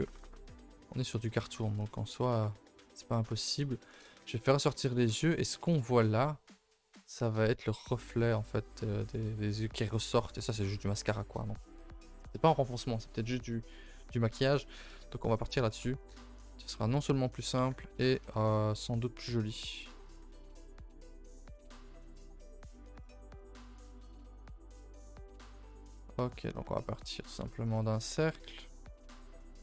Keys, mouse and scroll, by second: 0.1 ctrl+s, 0.5-0.9 scroll down 1, 0.9 scroll up 1, 1.1-3.1 middle drag, 3.1 scroll down 2, 3.3-3.9 shift+middle drag, 3.9 scroll up 5, 9.0-9.8 scroll down 6, 9.8 shift+middle drag, 10.1-13.0 scroll down 1, 14.9 z, 15.6-16.1 shift+middle drag, 16.1 KP_0, 17.5 scroll down 4, 17.7 Tab, 18.0 a, 18.2 a, 18.5-19.6 scroll up 1, 19.6 click, 19.9 a, 20.0 a, 20.3 ctrl+s, 20.6 z, 21.5 shift+middle click, 21.8 scroll up 1, 21.8 a, 22.0 a, 22.2 ctrl+s, 22.9 click, 23.1 a, 23.3 a, 23.5 shift+middle click, 29.1-29.6 drag.